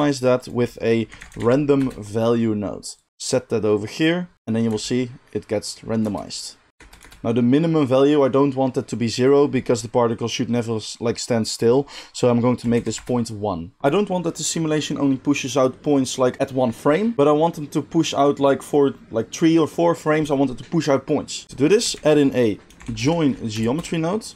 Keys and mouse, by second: 3.0 middle click, 3.2-24.3 drag, 4.6 space, 6.0 space, 6.7 space, 7.0 space, 21.9 shift+a.